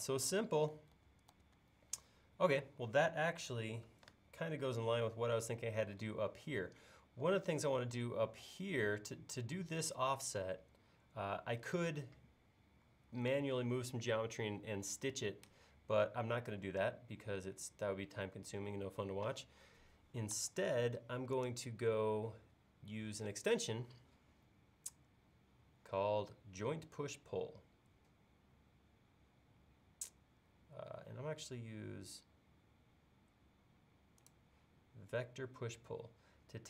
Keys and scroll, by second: 1.0 super+z, 20.5 super+s.